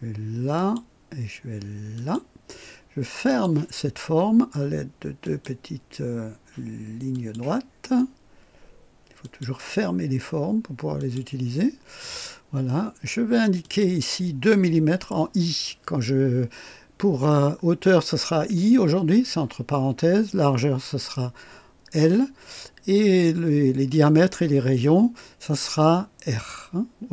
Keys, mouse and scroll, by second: 0.6 click, 2.0 click, 3.3 click, 5.2 click, 7.1 click, 9.2 click, 11.0 click, 12.1 right click, 13.6 click.